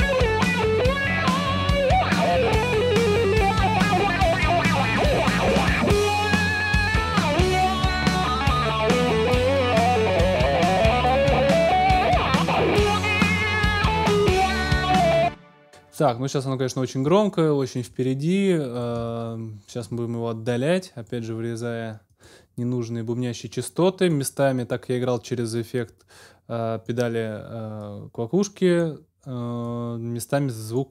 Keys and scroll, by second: 15.0 space.